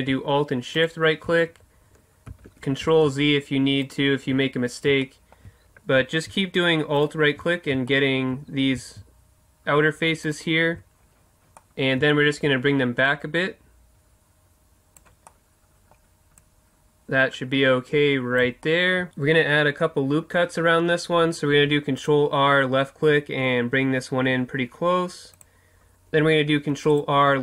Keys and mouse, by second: 0.7-2.6 right drag, 2.3 ctrl+z, 3.8-5.0 right drag, 5.0 middle click, 7.0-8.0 right drag, 8.0 middle click, 8.9-13.0 middle drag, 13.0-14.7 drag, 15.2-16.4 middle drag, 16.4-18.4 drag, 18.6 middle click, 21.5 ctrl+r, 25.4-27.4 drag, 26.5 ctrl+r.